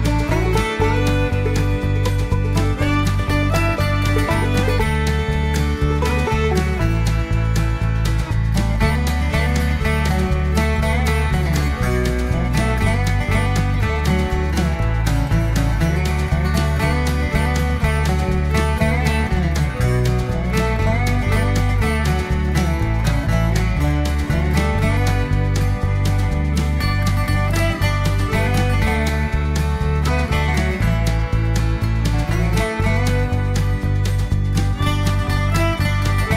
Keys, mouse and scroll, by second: 0.2 click, 1.3 click, 2.4 BackSpace, 2.6 v, 4.2 click, 5.2 click, 8.0 click, 10.8 click, 11.8 click, 12.7 0, 13.4 click, 14.3 1, 15.4 click, 16.5 click, 17.4 click, 18.5 click, 19.6 click, 21.4 click, 27.0 click, 28.9 click, 30.8 click, 33.1 click, 35.2-35.6 scroll up 1.